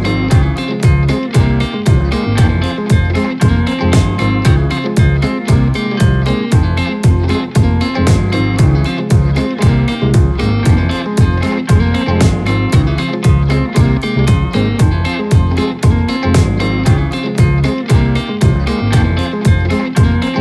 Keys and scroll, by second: 0.0 shift+g, 0.8 o, 4.1 ., 12.8 Caps_Lock, 13.1 o, 13.3 d.